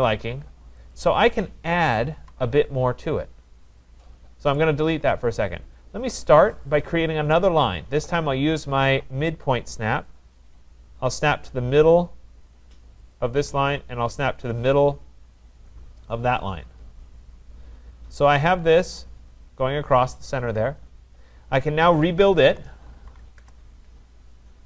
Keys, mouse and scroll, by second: 0.9 click, 2.2 Delete, 3.5 middle click, 3.6 middle click, 4.5 right click, 6.7 click, 10.2 click, 13.2 click, 15.7 click, 16.7 Return, 18.8 click, 22.1-23.6 typing.